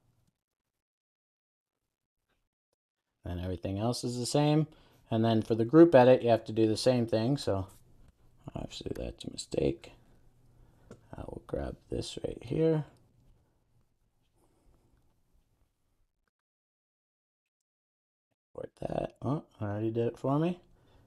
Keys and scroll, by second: 2.9 super+s, 9.8 super+s, 14.1 super+c, 17.2 super+v.